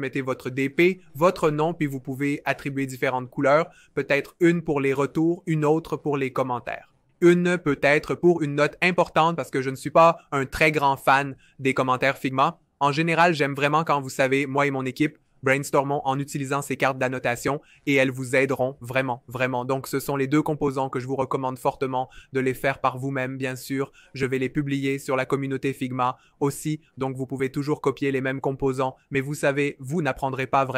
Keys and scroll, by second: 9.2 c, 11.0 ⟲, 11.9 v, 16.4 BackSpace.